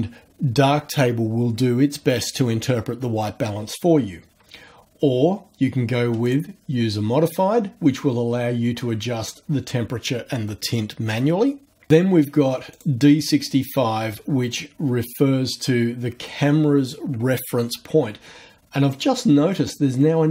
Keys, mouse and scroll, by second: 6.2 click, 12.7 click.